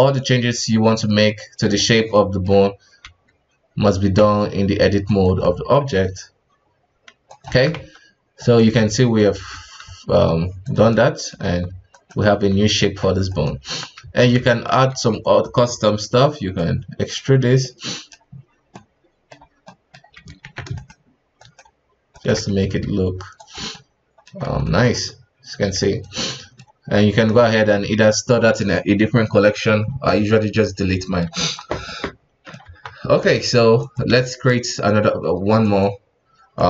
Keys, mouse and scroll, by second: 2.1 middle click, 3.0 s, 5.4 middle click, 5.9 s, 7.5 Tab, 7.7 KP_1, 8.4 right click, 9.1 right click, 9.5 Tab, 9.8 s, 10.9 middle click, 11.4 Tab, 11.9 right click, 12.3 g, 13.3 right click, 13.6 KP_1, 14.0 Tab, 14.4-14.9 shift+middle drag, 14.9 alt+a, 15.2 right click, 15.6 space, 16.5-17.6 drag, 17.6-20.4 middle drag, 20.4 ctrl+z, 20.7 shift+right click, 21.4 shift+right click, 22.1 shift+right click, 22.6 s, 23.6 Tab, 23.7-24.9 middle drag, 24.9 KP_1, 25.6 x, 26.3-30.4 middle drag, 31.0-31.3 middle drag, 31.3 KP_1, 31.9-32.6 middle drag, 32.6 KP_1, 32.9-33.3 scroll up 2, 33.3-33.8 shift+middle drag, 33.8 click, 34.1 shift+a, 36.2 scroll down 2, 36.5-36.6 middle drag.